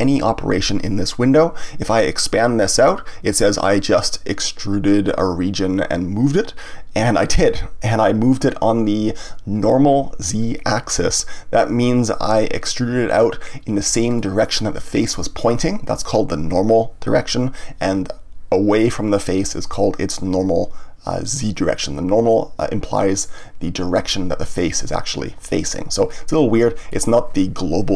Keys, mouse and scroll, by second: 2.6 click, 12.2-17.2 middle drag, 26.8-27.9 middle drag.